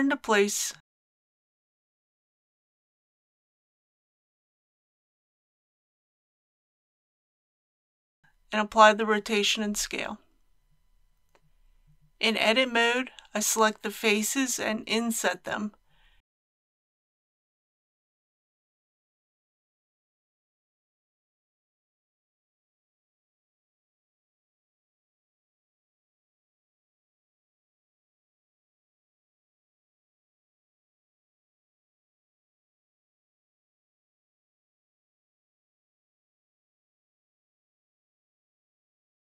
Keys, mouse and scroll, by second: 2.2 click, 8.5 ctrl+a, 9.2 click, 10.2 scroll down 1, 11.7 click, 11.7 Tab, 13.2 KP_3, 14.2-15.4 scroll up 1, 16.3 alt+a, 21.9 c, 23.3 click, 23.9 right click, 24.5-26.1 middle drag, 27.1 c, 28.4 click, 28.8 right click, 29.9 KP_3, 31.4 i, 38.6 click.